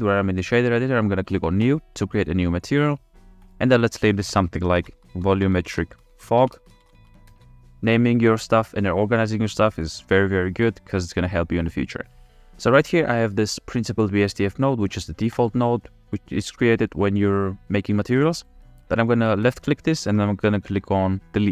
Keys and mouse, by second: 2.1 click, 3.4-7.7 drag, 14.0 click, 14.7 click, 15.4 click, 16.3-18.6 drag, 19.4 click.